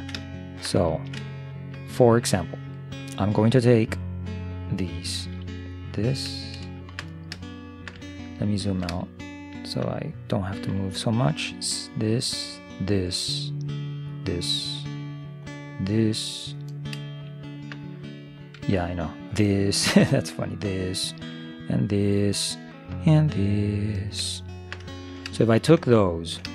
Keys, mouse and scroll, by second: 5.3 c, 7.6-10.4 middle drag, 10.6 c, 17.1-18.8 middle drag, 18.6 c, 24.4-26.5 middle drag.